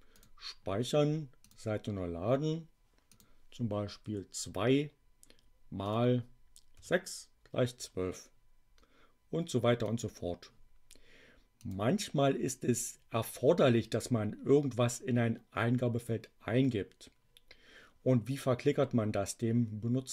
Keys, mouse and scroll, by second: 0.1 click, 1.4 click, 3.0 click, 4.1 2, 5.7 click, 6.8 6, 9.8 click, 10.2-11.5 scroll up 1, 11.5 click.